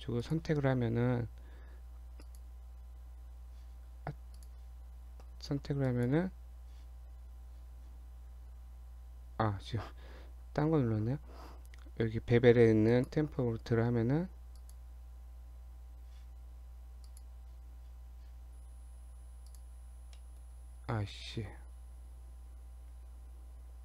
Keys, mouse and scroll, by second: 0.2 click, 4.3 click, 9.9-11.7 scroll down 3, 12.9 click, 17.1 click, 20.2 middle click, 20.8 Tab, 21.3 middle click, 22.9 a, 23.6 a.